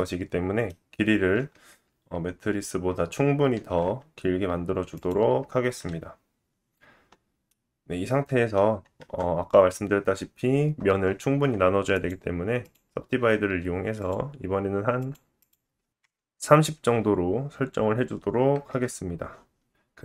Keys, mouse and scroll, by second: 7.4 middle click, 8.9 Tab, 11.9 right click, 13.3 click, 14.0 right click, 14.3 click, 15.1 click, 15.3 click, 18.0-20.0 drag, 19.7 Tab.